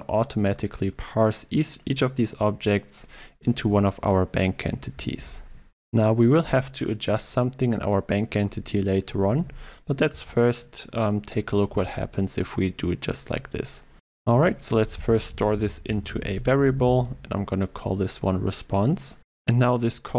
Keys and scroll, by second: 9.4 ctrl+e, 11.7 ctrl+e, 11.8 alt+Return.